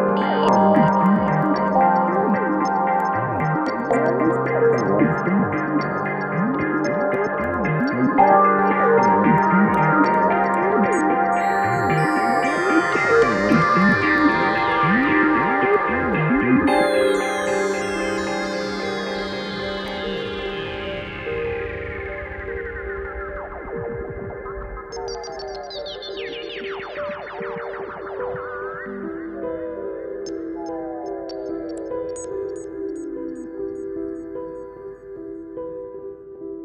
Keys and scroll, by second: 5.9 ctrl+d, 6.0 Escape, 9.9 F1, 10.4 1, 15.8 4, 19.6 3, 26.8 4.